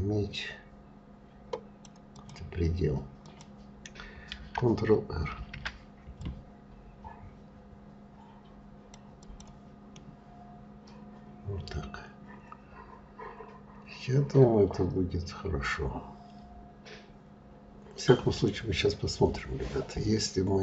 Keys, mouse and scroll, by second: 2.8 click, 4.9 ctrl+r, 9.5-12.6 middle drag, 18.3-19.5 scroll down 4, 19.5-20.2 scroll up 2.